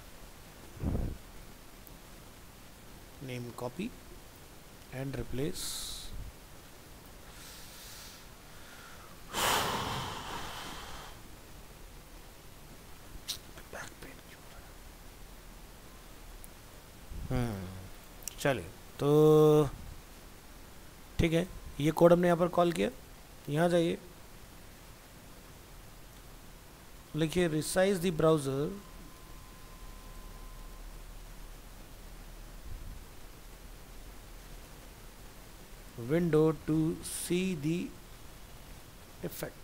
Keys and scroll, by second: 0.3 ctrl+s, 2.3 alt+f, 3.2 ctrl+c, 7.2 ctrl+v, 28.2 shift+Right.